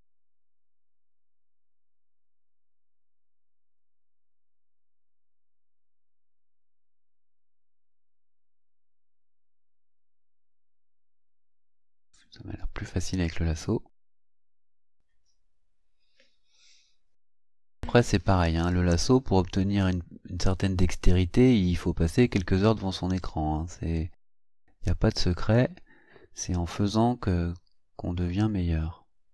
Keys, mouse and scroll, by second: 0.5 click, 1.1 click, 1.8 click, 2.5 click, 3.1 click, 3.7 click, 4.3 click, 4.9 click, 7.3 click, 8.2 click, 9.0 click, 10.0 click, 13.2 click, 14.3-17.6 drag, 18.7-25.7 drag, 26.8-29.3 drag.